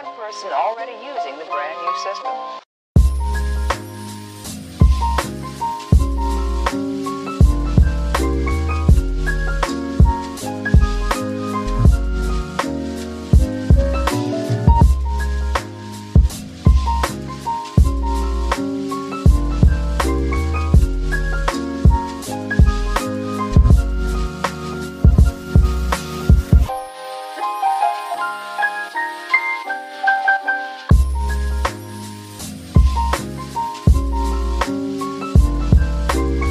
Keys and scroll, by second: 3.7 q, 6.1-6.6 typing, 9.0-9.9 typing, 11.0-11.7 typing, 22.3 space, 27.8-28.8 typing.